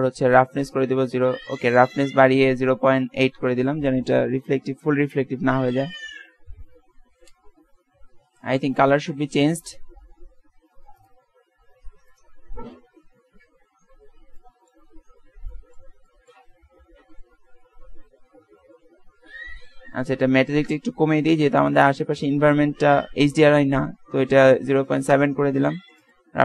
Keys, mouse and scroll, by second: 5.6 shift+z, 9.5-11.2 drag, 13.9-15.7 middle drag, 17.3 KP_0, 20.3-22.0 drag, 23.3-25.2 drag, 26.1-26.4 drag.